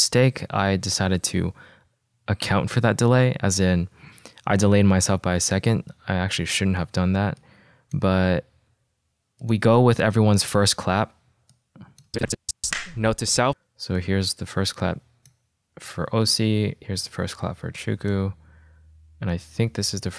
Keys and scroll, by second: 12.6 space.